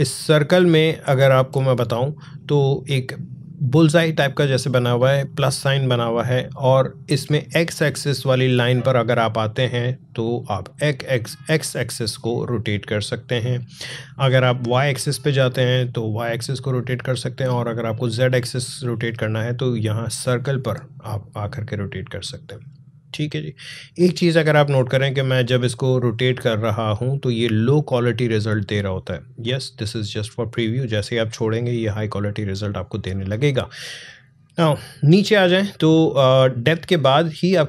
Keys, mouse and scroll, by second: 2.1 alt+scroll down 1, 10.1-33.3 drag.